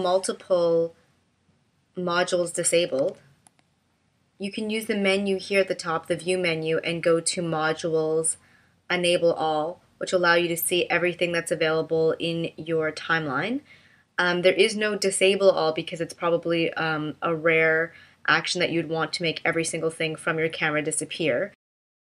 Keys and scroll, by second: 3.1 d.